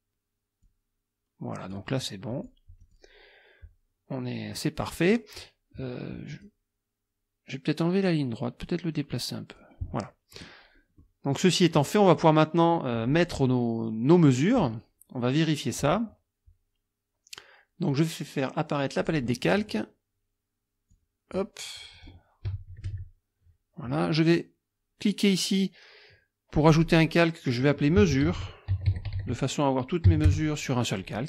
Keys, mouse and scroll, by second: 0.7-1.9 drag, 2.3 click, 2.8 click, 4.5-5.3 scroll up 2, 6.3 click, 8.1-9.8 drag, 11.0-11.5 scroll up 2, 17.9 click, 19.0 click, 20.9 click, 22.0 click, 22.9 KP_Subtract, 26.7 click, 27.7-30.1 typing, 30.3 Return.